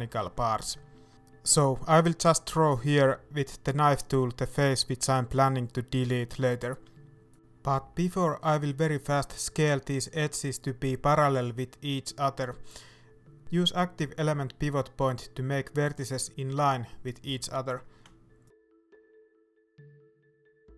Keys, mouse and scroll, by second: 5.0-7.8 shift+middle drag, 7.8-8.9 drag, 8.9 right click, 9.2 shift+middle click, 10.1 s, 13.5-15.1 scroll up 2, 15.1-16.6 drag, 16.6 right click, 17.0 middle click, 19.3-20.5 shift+right drag, 20.5-20.7 drag.